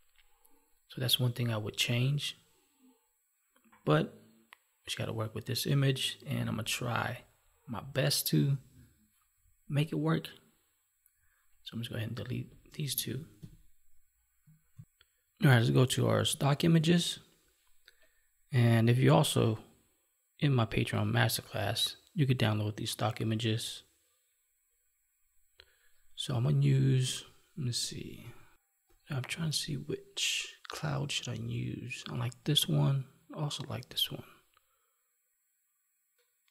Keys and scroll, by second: 13.3 Delete, 14.7 ctrl+s, 16.4 alt+Tab, 26.9 space, 28.2 Right, 28.8 Left, 32.5 Right, 33.8 Left.